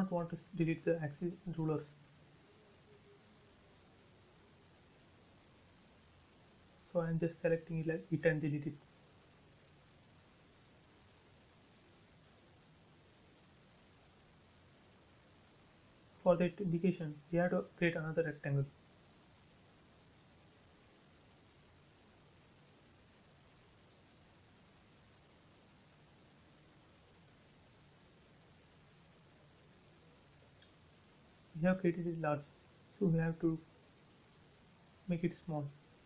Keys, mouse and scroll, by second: 0.3 click, 1.6-2.3 scroll up 1, 2.3 Right, 3.4 click, 3.5 space, 4.3 e, 4.4 click, 4.8 space, 5.1 scroll down 1, 6.4 middle click, 7.2 click, 7.8 shift+click, 8.5 Delete, 8.8 scroll down 1, 9.9 scroll down 1, 10.2 middle click, 10.8 scroll up 1, 11.2 shift+middle click, 12.2 scroll up 1, 12.5 r, 13.2-13.6 scroll up 1, 13.6 click, 14.8-15.3 scroll up 1, 17.8 Left, 19.1 scroll up 1, 22.4 scroll down 1, 25.1-25.6 scroll down 1, 26.4 Up, 28.6 click, 28.7 space, 29.0-30.0 scroll up 1, 32.4 t, 32.7 click.